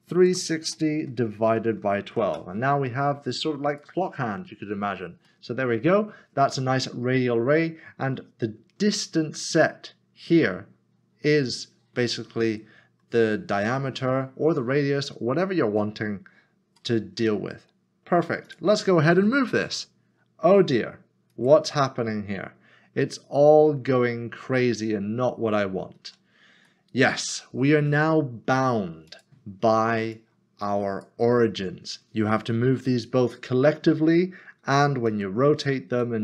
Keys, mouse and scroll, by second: 0.3-2.1 typing, 3.7 click, 4.9 scroll down 1, 5.3 middle click, 16.2 scroll up 1, 16.8 scroll up 1, 17.0 middle click, 17.5 scroll down 1, 18.5 click, 19.5 g, 21.3 click, 24.6 middle click, 26.0 ctrl+z, 26.8 middle click, 29.1 click, 34.6 typing.